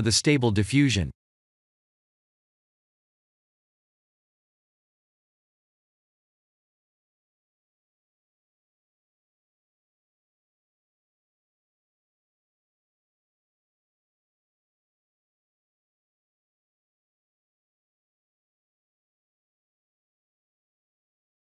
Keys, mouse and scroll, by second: 0.1 right click, 1.7 shift+a, 4.8 s, 5.7 g, 8.2 shift+d, 9.1 shift+d, 11.2 shift+d, 12.4 shift+d, 13.6 shift+d, 15.5 shift+d, 17.4 s, 18.2 shift+d, 18.3 shift+d, 19.6-21.4 typing.